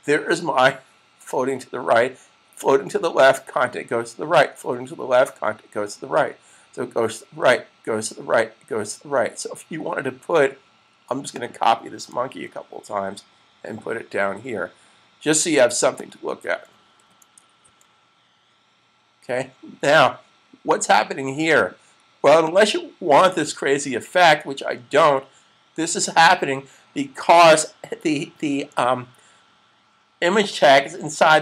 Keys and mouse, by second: 11.2 click, 15.8 click, 16.9 super+v, 17.5 s, 21.3 click, 26.0 click.